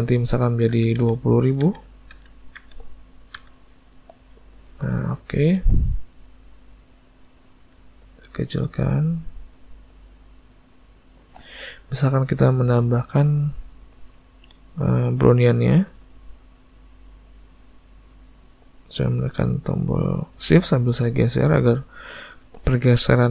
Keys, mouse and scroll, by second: 4.3 middle click, 5.7 s, 9.1 click, 13.4 click, 16.2 shift+click.